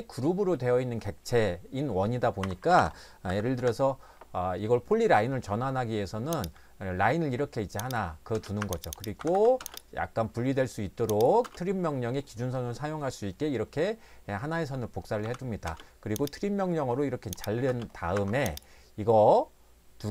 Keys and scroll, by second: 2.4 Escape, 2.6 Escape, 2.8 Escape, 3.3 i, 3.5 Return, 8.3-9.6 typing, 8.6 Escape, 11.5 space, 15.2 t, 15.7 space, 17.7 space, 18.1 Escape.